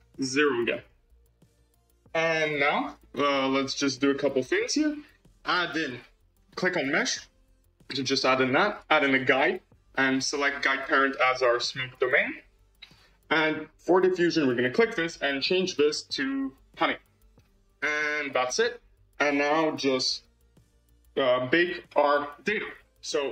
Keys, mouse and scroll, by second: 1.7 click, 2.2-5.5 scroll down 13, 6.4 click, 6.8-8.7 drag, 9.0-12.9 drag, 13.8-14.6 drag, 15.2-17.6 drag, 18.3-21.1 scroll down 7.